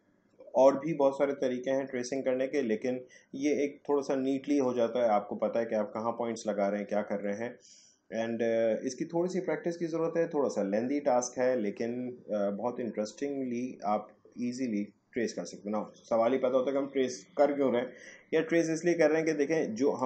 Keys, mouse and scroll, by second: 19.2-20.0 drag.